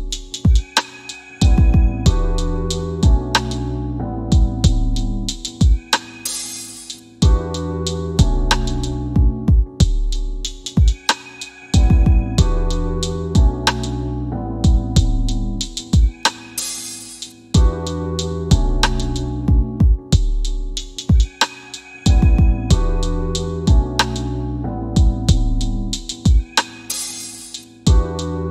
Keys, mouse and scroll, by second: 2.0 click, 6.3 right click, 7.2 click, 8.6 p, 9.9 f, 10.4 scroll down 1, 11.3 middle click, 11.4 click, 11.6 right click, 12.8 click, 13.2 scroll down 1, 13.6 middle click, 15.6 typing, 16.6 scroll up 1, 16.6 typing, 17.7 scroll down 1, 17.9-18.7 typing, 18.3 middle click, 19.7 c, 20.6 shift+f, 21.6 right click, 23.6 click, 26.4 click.